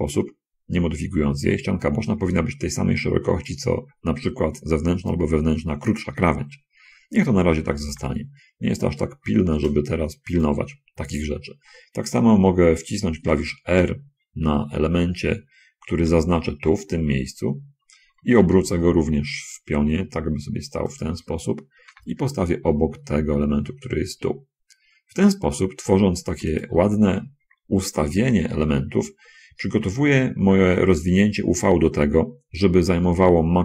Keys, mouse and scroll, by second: 8.0 l, 8.2 g, 10.4 click, 13.4 r, 14.8 Escape, 16.4 l, 18.9 r, 20.9 ctrl+click, 22.2 g, 28.4 l, 29.9 g.